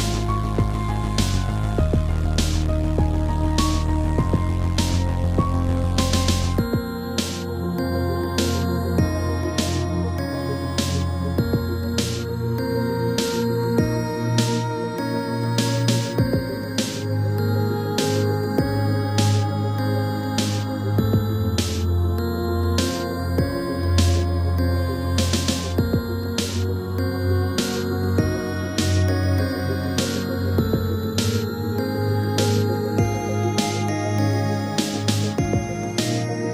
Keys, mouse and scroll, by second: 0.2 r, 1.6 click, 3.1 click, 4.7 click, 6.4 scroll down 1, 6.6 middle click, 7.4 shift+middle click, 7.5 shift+middle click, 7.6 middle click, 8.1 middle click, 8.6 shift+middle click, 9.0 middle click, 9.1 middle click, 9.9 Left, 10.5 Left, 10.9 Left, 11.5 Right, 12.4 Right, 12.9 Left, 13.1 Left, 13.3 Left, 14.0 Right, 15.9 Right, 25.4 middle click, 25.8-26.2 scroll up 3, 26.2 middle click, 27.4-27.9 typing, 31.0 Right, 31.7 Right, 33.1 i, 34.0 scroll up 3, 34.8 a, 35.5 b, 35.7 click.